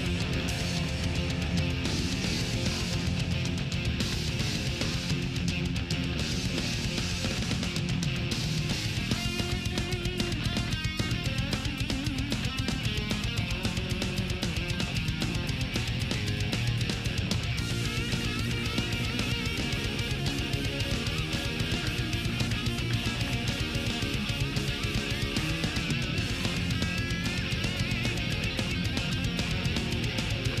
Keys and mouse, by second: 0.1 click, 1.4 click, 2.8-5.2 drag, 5.9 click, 6.2 click, 7.9 click, 8.7 click, 9.6-10.9 drag, 12.9-14.4 drag, 15.2 click, 16.7 click, 18.4-21.4 drag, 21.6-24.4 drag, 24.7 click, 26.5 click, 27.3 click, 28.4-29.6 drag, 30.4-30.6 drag.